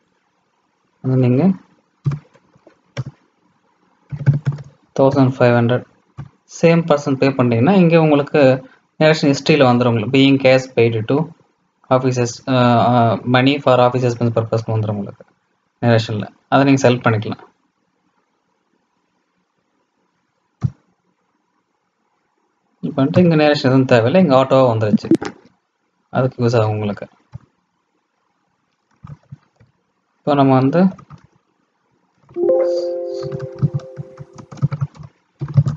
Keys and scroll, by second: 32.2 alt+c.